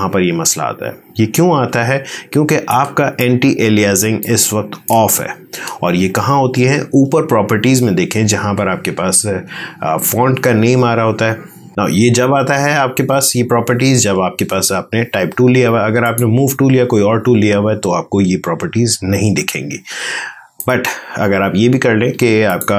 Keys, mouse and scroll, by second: 3.2 click, 4.1-7.1 ctrl+drag, 15.9 click, 20.5 click.